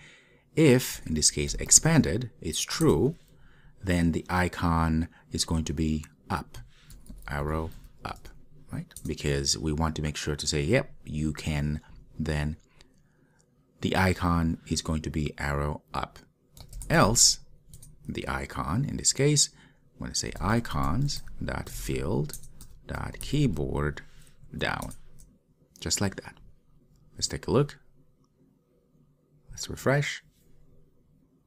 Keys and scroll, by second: 1.0 Return, 9.2 Return, 22.4 Return.